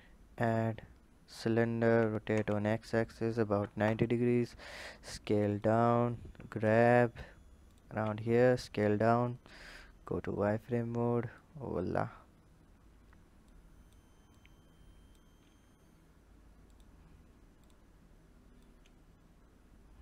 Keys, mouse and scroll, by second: 1.6 r, 4.4 s, 9.4 drag, 9.9-10.2 scroll up 3, 11.1 click, 11.9 scroll up 2, 13.2 click, 14.1 click, 17.4 click, 18.4 click.